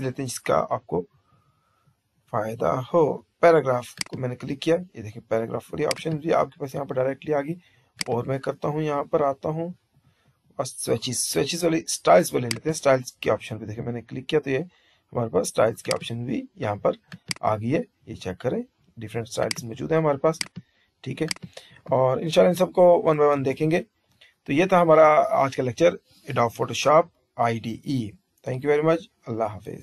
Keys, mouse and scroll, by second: 23.4 shift+z.